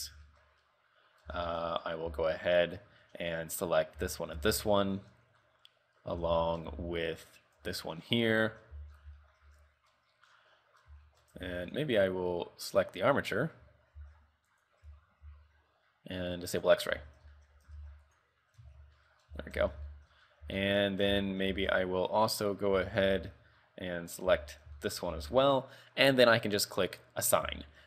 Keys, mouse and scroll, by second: 0.4 shift+middle click, 0.8 middle click, 1.5 shift+middle click, 1.9 scroll down 3, 2.2 z, 4.1 l, 4.5 l, 4.9 shift+middle click, 5.2 scroll up 5, 5.6 middle click, 6.3 z, 6.6 shift+middle click, 6.9 z, 7.7 l, 8.2-8.6 scroll down 2, 8.6 shift+middle click, 8.9 z, 9.1 scroll down 2, 9.3 shift+middle click, 9.7 middle click, 10.5 scroll down 3, 10.7 middle click, 11.2 shift+middle click, 11.7 Tab, 12.2 right click, 14.2 ctrl+Tab, 14.7 right click, 16.7 click, 17.1 ctrl+Tab, 17.5 shift+middle click, 18.0 ctrl+Tab, 18.2 right click, 18.9 ctrl+Tab, 19.1 middle click, 19.4 z, 19.8 Tab, 20.1 shift+middle click, 20.3-20.7 scroll up 5, 20.7 shift+middle click, 21.1 scroll up 1, 21.2 z, 21.6 z, 21.8-22.1 scroll down 3, 22.9 z, 23.2 z, 24.4 l, 24.9 shift+middle click, 25.2 z, 25.6 scroll down 5, 27.0 click, 27.7 Tab.